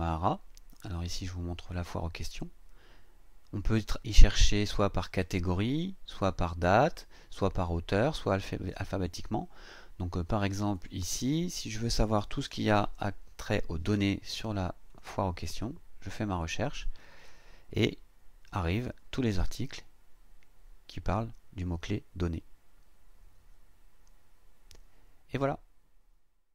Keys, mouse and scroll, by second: 0.7 click, 10.5 click, 11.9-13.9 typing, 14.9 click, 17.4-17.8 scroll down 2, 19.4-19.7 scroll down 2, 20.2-20.7 scroll down 2, 21.5-21.9 scroll down 2, 22.8-23.1 scroll down 2, 23.6-24.1 scroll down 2.